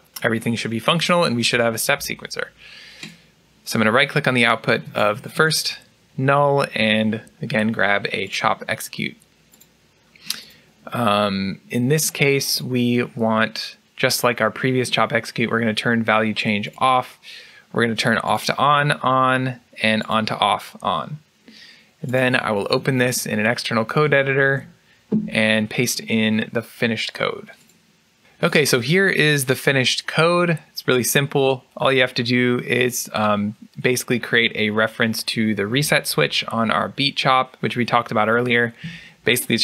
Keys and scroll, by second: 23.9 ctrl+e.